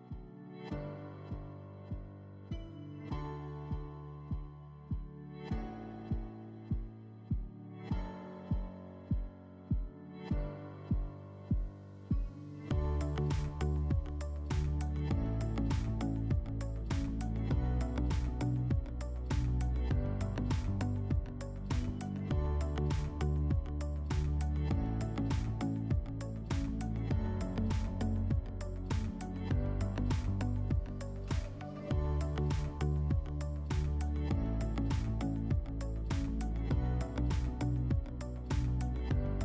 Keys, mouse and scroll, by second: 0.5 click, 1.4 click, 2.5 click, 3.0 click, 4.1 click, 4.8 click, 5.3 scroll, 6.1 click, 6.8 click, 7.6 click, 8.5 click, 9.4 click, 10.3 click, 10.7 click, 11.4 click, 11.7 click, 12.4 click, 12.7 click, 13.5 click, 13.9 alt+middle click, 14.5 click, 15.1 click, 15.4 click, 15.8 click, 16.1 click, 16.5 click, 16.9 middle click, 17.5 click, 18.3 click, 18.9 click, 19.2 click, 19.8 click, 20.1 click, 20.8 click, 21.3 click, 21.9 click, 22.1 click, 23.3 click, 23.8 click, 24.9 click, 25.7 click, 26.2 click, 26.5 ctrl+z, 27.3 click, 28.8 click, 29.8 middle click, 30.3 click, 30.8 click, 31.0 click, 31.5 click, 31.7 click, 32.1 click, 32.3 click, 32.9 click, 33.1 click, 33.7 click, 34.4-34.9 scroll, 35.2 click, 35.5 click, 36.2 click, 36.4 click, 36.8 click, 36.9 click, 37.0 click, 38.6 click, 38.8 click, 39.2 click.